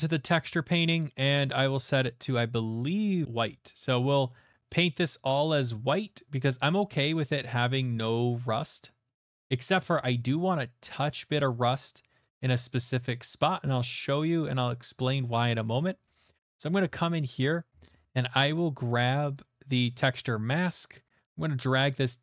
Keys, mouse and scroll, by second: 2.2 click, 2.9 click, 3.2 click, 3.2 shift+middle click, 3.5 click, 3.8 click, 4.6 click, 5.0 click, 5.3 click, 5.6 click, 5.9 click, 6.5 middle click, 6.9 click, 7.2 click, 7.7 middle click, 8.3 click, 8.5 click, 9.1 middle click, 9.3 click, 9.8 middle click, 11.7 click, 12.2 middle click, 12.9 click, 13.4 middle click, 14.2 click, 14.8 middle click, 15.2 click, 15.8 middle click, 17.3 middle click, 17.7 shift+middle click, 17.9 shift+middle click, 18.2 middle click, 18.7 shift+middle click, 19.2 middle click, 20.2 shift+middle click, 21.0 middle click, 21.2 shift+middle click, 21.6 click, 21.9 click.